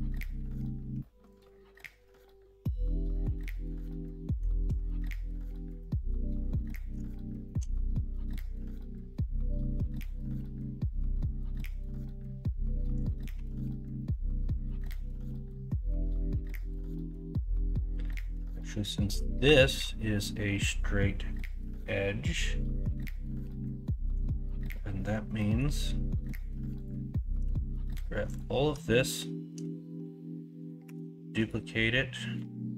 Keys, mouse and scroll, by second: 3.1 middle click, 3.7 middle click, 5.8-6.2 middle drag, 6.5-7.4 middle drag, 8.2-9.7 middle drag, 13.3 Tab, 13.7 middle click, 17.6 middle click, 25.4 middle click, 30.8 shift+d.